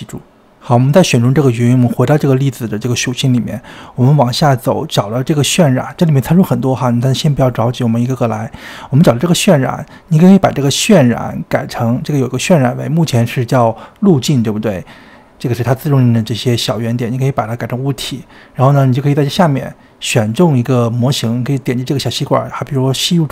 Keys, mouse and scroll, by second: 0.8 click, 2.8 click, 3.8-6.5 scroll down 5, 6.5-8.0 drag, 8.0-8.5 scroll up 4, 8.5-9.7 scroll down 5, 10.0-14.1 drag, 14.2 space, 15.3 space, 15.8-18.9 drag, 19.8-21.6 scroll down 2, 21.6 click.